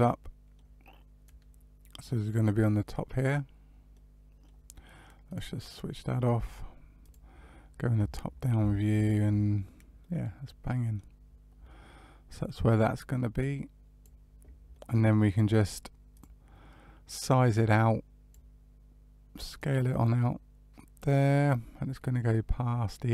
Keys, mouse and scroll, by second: 1.2 click, 3.9 middle click, 5.2 click, 7.0 click, 8.2-8.5 scroll up 2, 8.7 shift+middle click, 9.9 middle click, 11.2-11.6 scroll down 2, 11.6 middle click, 13.3 click, 14.7 middle click, 16.1 click, 17.5 click, 19.5 click.